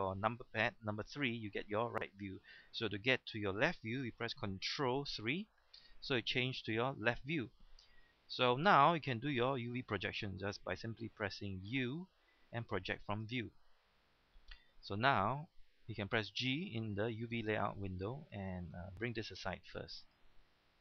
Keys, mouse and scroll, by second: 5.4 ctrl+KP_3, 11.7 u, 12.8-13.8 drag, 17.3 g, 20.0 click, 20.7-20.8 scroll down 1.